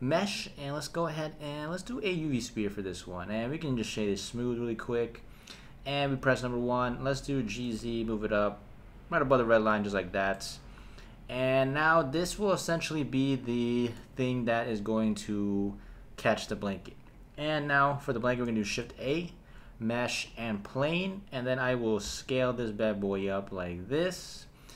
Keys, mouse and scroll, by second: 3.4 right click, 6.0 KP_1, 7.3 g, 7.6 z, 9.4 click, 10.3 middle click, 10.5 drag, 10.6 middle click, 10.7-11.1 drag, 11.1-16.7 middle drag, 17.0 click, 18.9 shift+a, 22.0 s, 24.0 click.